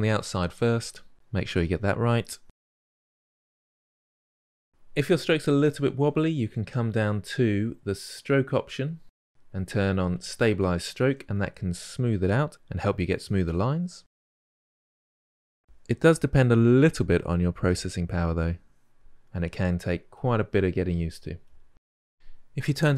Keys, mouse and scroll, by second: 0.0-0.5 drag, 0.5 middle click, 0.6 drag, 0.9 ctrl+middle click, 1.1 click, 1.9 middle click, 2.0-2.5 drag, 2.5-3.8 ctrl+shift+middle drag, 3.8-4.5 drag, 4.5-12.0 middle drag, 12.0-22.9 drag.